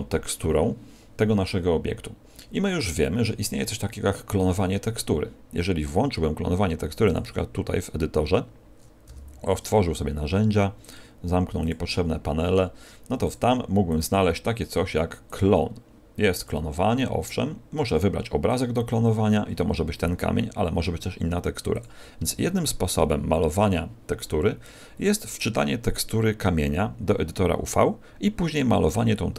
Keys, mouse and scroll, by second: 7.0 click, 9.0 n, 10.8 click, 11.6 click, 13.2 click, 13.8 click, 15.2 click, 17.0 scroll down 5, 18.4 click.